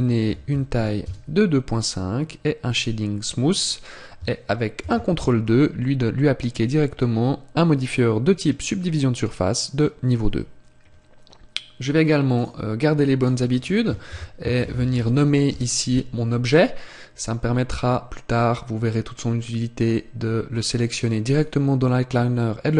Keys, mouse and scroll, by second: 2.8 click, 4.8 ctrl+2, 6.6 click, 10.1 click, 12.4 click, 18.4 click, 20.6 click.